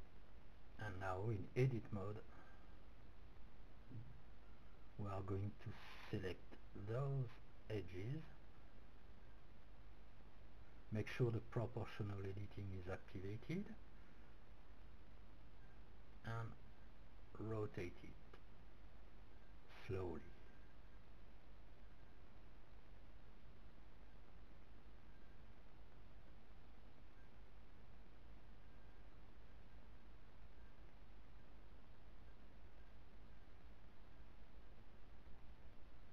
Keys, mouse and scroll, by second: 0.0-1.2 drag, 3.7 Tab, 4.3 middle click, 5.4 a, 6.3-8.7 middle drag, 8.1 c, 13.6 middle click, 16.8 r, 25.4-27.6 drag, 27.0 r, 33.4 click, 35.5 r.